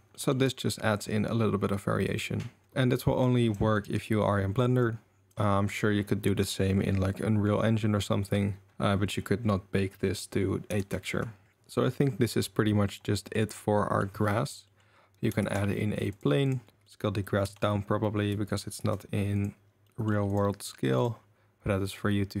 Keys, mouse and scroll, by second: 0.1-2.6 drag, 2.6 ctrl+s, 3.4 click, 3.7 click, 4.9-5.4 drag, 10.7 g, 12.3 click, 12.9-13.3 middle drag, 14.0-14.7 middle drag, 14.8-15.6 middle drag, 15.4 shift+a, 16.7 s, 17.4 s, 18.8 ctrl+a, 19.8 middle drag, 20.3 click, 21.0 click.